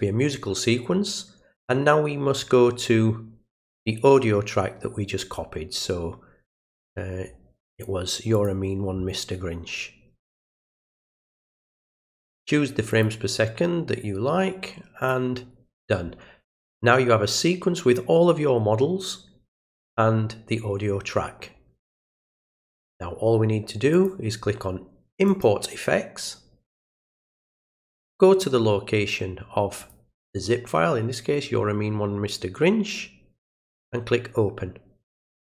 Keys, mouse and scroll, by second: 6.9-8.4 middle drag, 8.4 click, 10.5 click, 12.9 click, 15.0 click, 23.9 click, 25.3 click, 27.4 click, 29.8 click, 33.5 click.